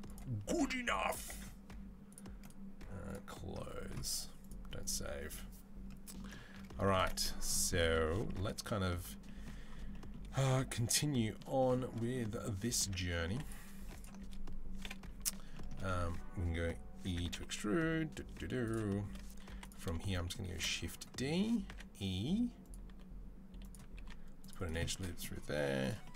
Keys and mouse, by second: 4.9-19.8 middle drag, 13.2 2, 14.6 KP_7, 16.9 e, 19.3 2, 20.3 shift+d, 21.5 e, 22.7 r, 23.9 ctrl+r, 25.4-26.1 middle drag, 25.4 z.